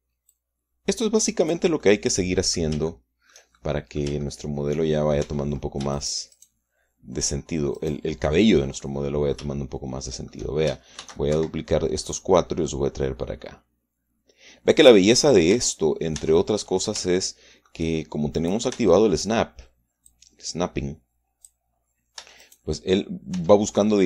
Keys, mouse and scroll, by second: 1.1-2.5 drag, 2.7 click, 3.6 shift+middle click, 3.7 shift+click, 4.3 shift+middle click, 4.4 shift+click, 4.9 shift+middle click, 5.1 shift+middle click, 6.1 shift+Tab, 6.8 shift+right click, 7.2 shift+right click, 8.7 shift+middle click, 9.7 middle click, 11.1 shift+middle click, 11.9 shift+d, 12.2 shift+Escape, 13.0-15.9 drag, 16.4 Tab, 17.3 Tab, 17.3-17.7 scroll up 1, 17.9 shift+middle click, 19.3 middle click, 19.6 Tab, 20.9-22.5 drag, 23.1 Tab, 23.3 right click.